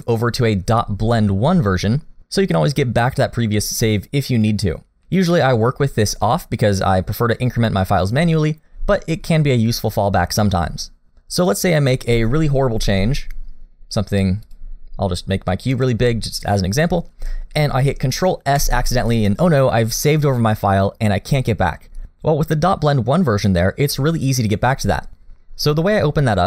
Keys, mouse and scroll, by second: 12.4-12.8 scroll down 1, 12.8 s, 15.2 scroll down 1, 15.5 middle click, 16.2 scroll up 1, 18.6 ctrl+s.